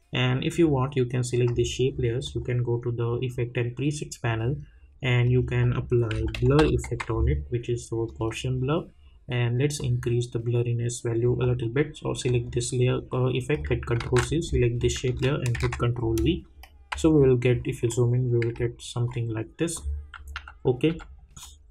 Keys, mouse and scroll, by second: 0.5 click, 5.2 click, 5.9-7.3 typing, 8.0-12.2 drag, 14.0 ctrl+c, 14.8 click, 15.5 ctrl+v, 17.1-17.9 alt+scroll up 1, 18.7-19.1 alt+scroll down 1, 19.7 click, 20.3 u, 20.8 u, 21.4 click.